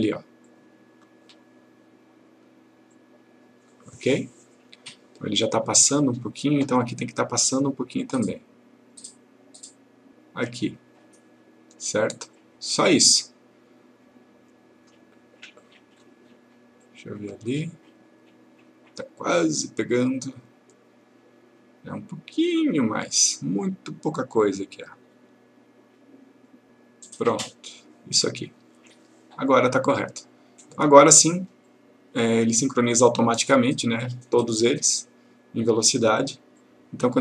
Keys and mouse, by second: 9.0 click, 12.4 click, 26.5-27.9 drag, 29.6-31.1 drag.